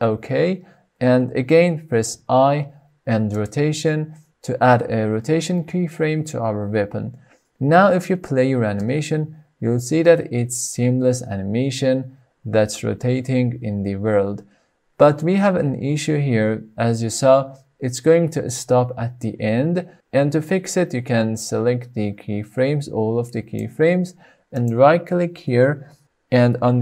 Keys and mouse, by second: 0.7 KP_Enter, 2.6 i, 7.1 space, 18.2 space, 19.3-24.0 drag, 24.8-26.8 right drag.